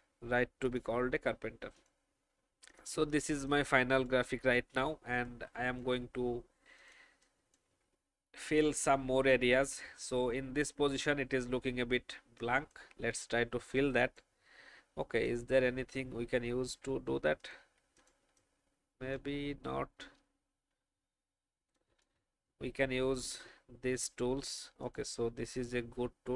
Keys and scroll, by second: 7.2 space, 16.6 alt+v, 17.5 v, 18.2 space, 21.8 alt+space.